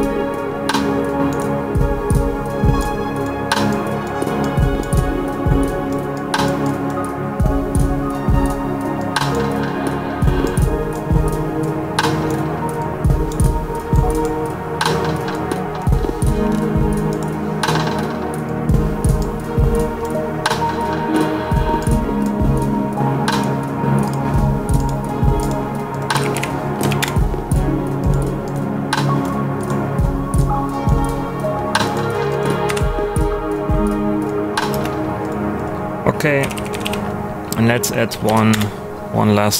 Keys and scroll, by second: 25.9-26.8 typing, 27.0 Return, 32.6 Delete, 34.7 space, 36.1-37.3 typing, 38.1 Down, 38.5 Return.